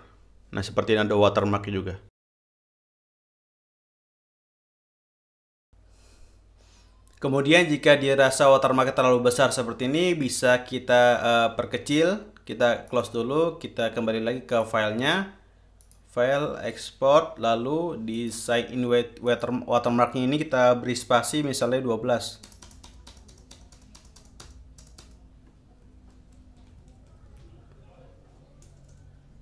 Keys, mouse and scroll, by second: 0.0 click, 2.0 click, 3.2 click, 4.2 click, 13.2 click, 14.9 click, 16.2 click, 17.0 click, 18.5-19.1 drag, 19.6 click, 22.8 space, 25.9-29.4 typing.